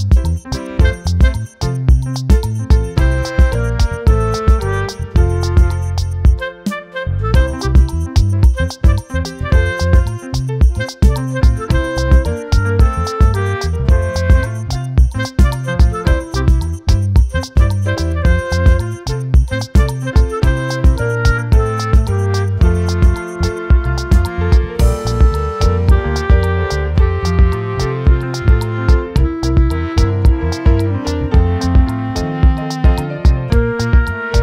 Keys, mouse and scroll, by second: 0.0-4.2 shift+right drag, 4.5 shift+right click, 6.0 click, 10.6 click, 13.8 click, 16.6 click, 17.6-18.9 shift+middle drag, 21.5 click, 21.8 click, 25.2-26.1 drag, 27.1-28.0 drag, 28.8-31.7 scroll up 5, 31.7-32.6 scroll up 1.